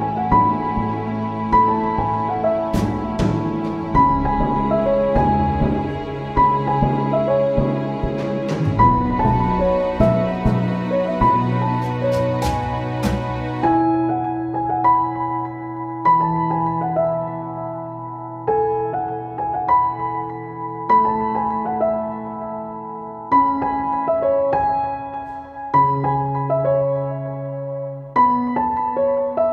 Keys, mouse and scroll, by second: 13.7 click, 14.8 right click, 15.3 click, 16.8 click, 20.1-29.0 drag.